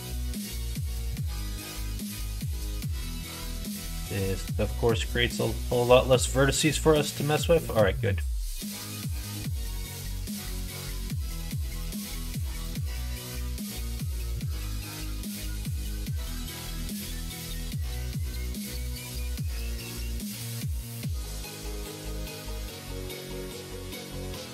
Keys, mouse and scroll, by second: 0.4 f, 0.7 middle click, 2.1 ctrl+r, 11.4 alt+click, 12.3 ctrl+f, 13.6-14.9 middle drag, 15.3 middle click, 16.0-17.1 middle drag, 18.7 middle click, 20.3 shift+click, 20.7 middle click, 21.3 middle click, 22.5 shift+click, 23.4 middle click.